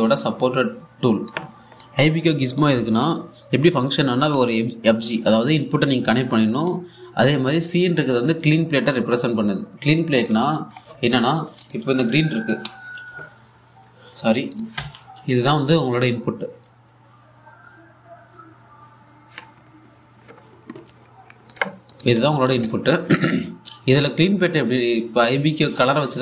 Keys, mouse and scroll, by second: 5.0-11.2 drag, 11.2-12.2 scroll down 1, 12.3 click, 12.5 typing, 13.6-14.4 typing, 14.9-15.2 scroll up 1, 15.2 click, 15.4 1, 20.2-21.1 scroll up 1, 22.1 click, 22.8 1, 23.3 alt+click, 25.7 scroll up 1, 25.9 click.